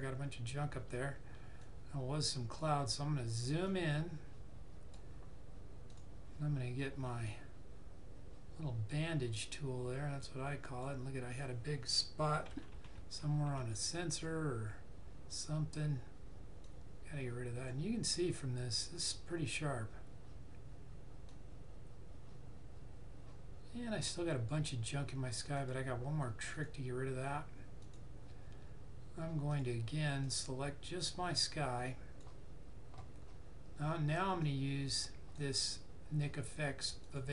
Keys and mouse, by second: 8.8 click, 12.4 ], 14.0 click, 16.5 click, 21.2 click.